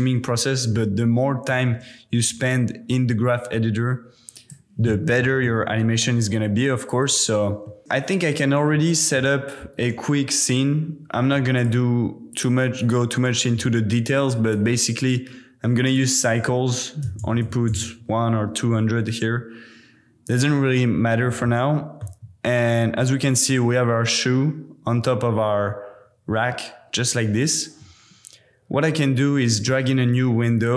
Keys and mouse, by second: 0.7-1.5 drag, 1.6 space, 2.4 space, 4.4-5.5 drag, 6.8 click, 7.1 space, 7.6 drag, 7.8 space, 8.7-9.2 drag, 9.9 z, 12.3 click, 12.8-15.0 drag, 17.4 KP_0, 21.4 shift+middle click, 22.6 middle click, 26.8 middle click, 27.0 middle click, 27.2 middle click, 29.0 middle click, 29.1 click, 29.4 middle click, 29.4-30.6 drag.